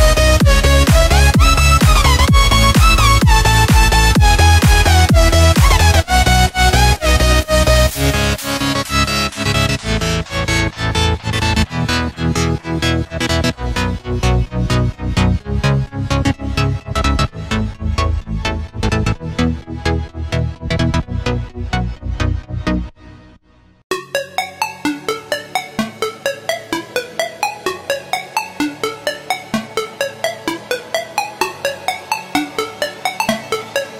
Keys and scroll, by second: 0.4 super+c, 1.1 space, 1.6 alt+super+space, 1.7 alt+super+space, 1.8 alt+super+space, 1.9 alt+super+space, 2.0 alt+super+space, 2.1 alt+super+space, 3.6 super+v, 4.2 space, 4.7 super+space, 4.8 super+space, 4.9 super+space, 9.1 space, 9.6 alt+super+space, 9.8 alt+super+space, 10.0 alt+super+space, 10.6-13.6 typing, 12.5 alt+super+space, 12.8 alt+super+space, 14.9 super+z, 15.9 Delete, 17.1-17.8 typing, 19.2-20.6 typing, 19.7 super+space, 19.8 super+space, 19.9 super+space, 20.0 super+space, 20.2 super+space, 20.7-21.0 super+space, 23.2 space, 23.8 alt+super+space, 24.9 space, 25.4 alt+super+space, 25.5 alt+super+space, 25.6 alt+super+space, 25.6 alt+super+space, 25.7-26.8 alt+super+space, 29.8 Left, 32.1 Left.